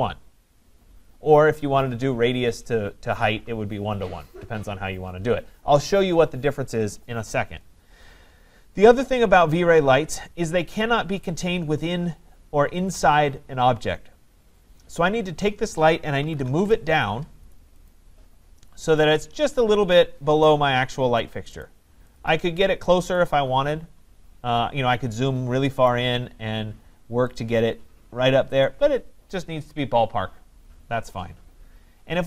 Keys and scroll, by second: 16.5 Return.